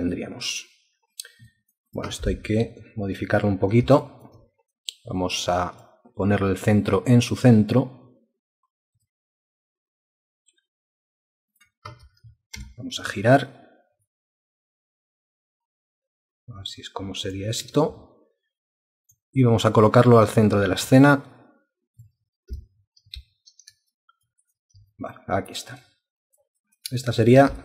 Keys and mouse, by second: 0.1 alt+click, 1.5 alt+click, 1.9 alt+click, 2.6 ctrl+space, 4.0 alt+shift+click, 17.6 space, 23.2 ctrl+space, 23.9 alt+click, 24.4 alt+click, 25.8 alt+click, 26.7 alt+click, 27.0 alt+double click, 27.3 ctrl+alt+click.